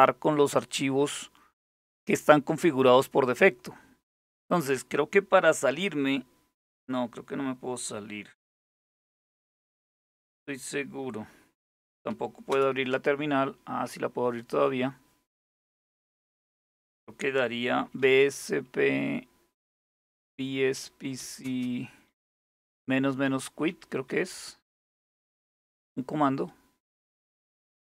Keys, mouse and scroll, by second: 1.8 click, 3.9 click, 12.1 super+Return, 17.2-18.4 typing, 20.0-25.6 typing, 26.6 Return.